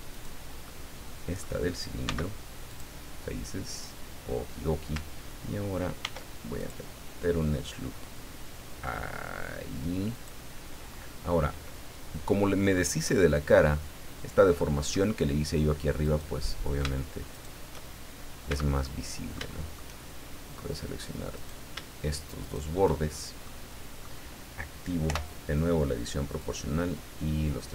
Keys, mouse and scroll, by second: 0.1 right click, 0.6 middle click, 2.0 x, 2.7 click, 4.0 scroll down 1, 6.0 ctrl+r, 6.6 ctrl+click, 10.1 click, 10.9-11.2 scroll up 1, 11.6-12.9 middle drag, 13.0 middle click, 14.6 middle click, 16.0 right click, 17.3 shift+right click, 18.5 a, 18.8-19.9 middle drag, 21.3 right click, 22.4 shift+right click, 23.4 middle click, 25.0 o, 26.4-27.7 drag.